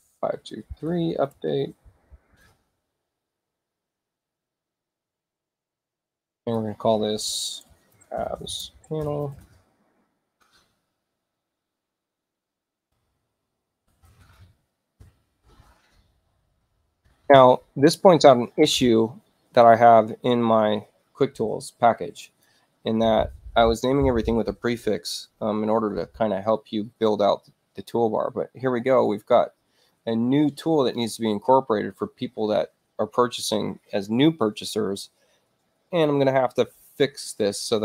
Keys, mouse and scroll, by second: 0.0-2.8 typing, 4.5 click, 4.7 click, 6.5 click, 7.7-9.9 typing, 13.5-14.8 typing, 15.0 Return, 22.3 click, 30.8 click.